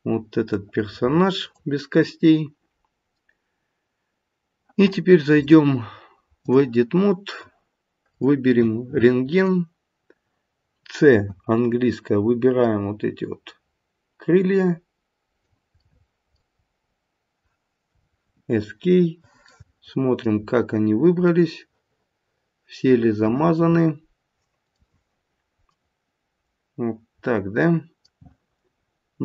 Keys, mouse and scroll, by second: 2.2-2.8 scroll up 1, 2.8-3.5 scroll down 1, 5.3 click, 8.2 click, 9.4 click, 11.2 c, 18.7-19.4 scroll up 3, 19.4 middle click, 19.4 scroll up 2, 19.6 middle click, 20.0 middle click, 20.6-21.1 scroll down 4, 21.2 middle click, 22.9 middle click, 25.3-25.7 scroll down 1, 25.7 middle click.